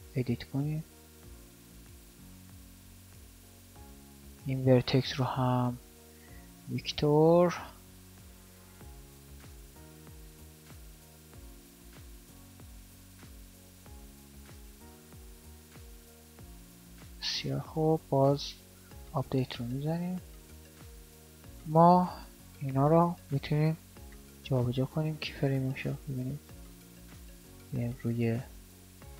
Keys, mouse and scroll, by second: 5.0 v, 7.6 alt+a, 9.5 alt+a, 10.5 right click, 13.3 alt+a, 14.5 shift+Left, 16.3 alt+a, 20.9 alt+a.